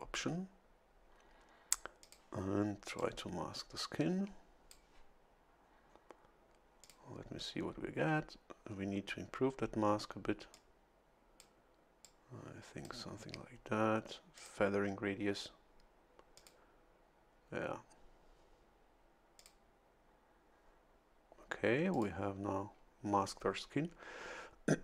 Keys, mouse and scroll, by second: 2.0 click, 3.0-5.1 drag, 6.8 click, 8.7 scroll down 1, 10.5-11.6 drag, 12.0-13.0 drag, 14.3 click, 16.4 click, 19.4 click, 21.9 click.